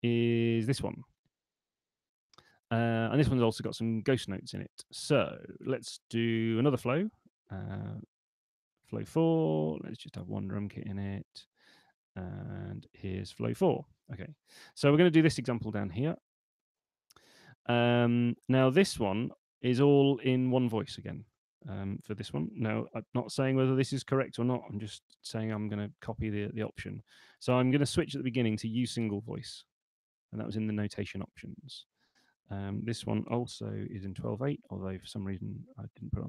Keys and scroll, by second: 6.6 super+1, 11.1 super+2, 26.5 shift+super+n, 32.9-34.4 typing.